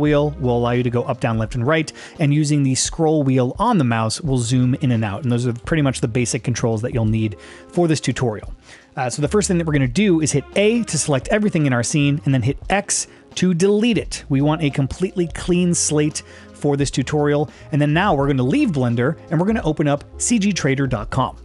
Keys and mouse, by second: 4.8-5.1 middle drag, 5.3 shift+middle drag, 5.7 middle click, 6.2 middle click, 6.7-7.0 shift+middle drag, 7.2 middle click, 7.7 shift+middle drag, 8.3 middle click, 10.9 a, 12.7 x.